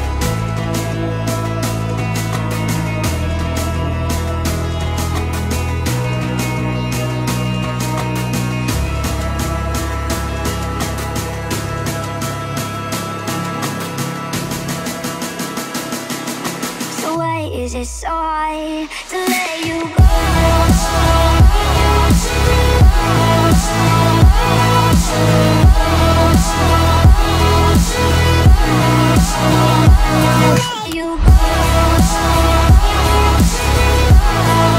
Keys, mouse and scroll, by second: 0.6 m, 1.7 ctrl+click, 2.9 space, 3.0 scroll down 1, 3.8 shift+middle click, 9.0 click, 12.6 right click, 13.8 click, 14.6 scroll down 1, 14.7 shift+click, 15.2 middle click, 15.7 m, 15.9 click, 17.2 Left, 18.7 1, 19.1 Return, 20.1 ctrl+z, 20.8 space, 21.8 m, 21.9 click, 22.9 Left, 23.1-23.8 typing, 23.7 Return, 24.7 scroll up 1, 25.1 shift+middle click, 25.8 scroll up 1, 26.3 middle click, 27.1 t, 27.6 click, 29.2-29.5 typing, 29.8 Return, 30.8 click, 31.6-32.0 typing, 32.4 Return, 33.3 t, 34.3 click.